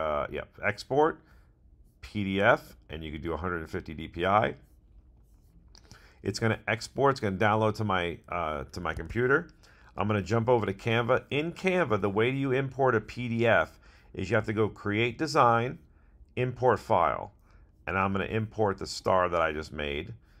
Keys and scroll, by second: 8.9 super+Tab.